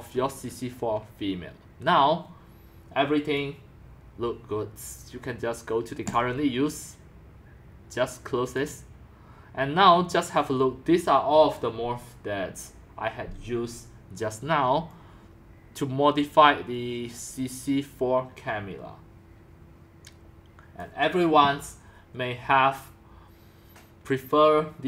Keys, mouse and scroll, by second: 0.2 c, 12.5-13.5 drag, 17.1-20.1 drag.